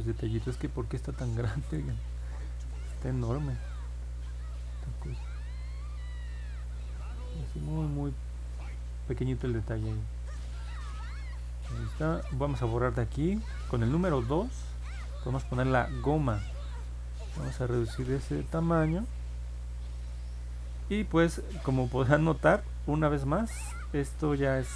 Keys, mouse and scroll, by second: 5.0 click, 5.9 click, 9.9 click, 10.5 click, 14.4 2.